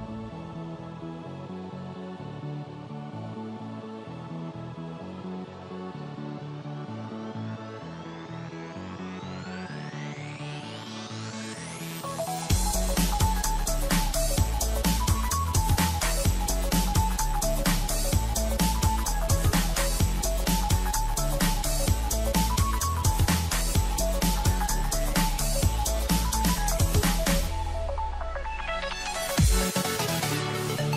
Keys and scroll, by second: 3.0 ctrl+-, 3.5 ctrl+=, 7.3 alt+space, 12.6 ctrl+Return, 13.0 alt+Delete, 13.6 ctrl+alt+z, 14.3 alt+Delete, 14.6 ctrl+d, 16.5 ctrl+-, 16.6 ctrl+0, 17.2 ctrl+-, 17.8 ctrl+=, 18.6 ctrl+-, 18.8 ctrl+0.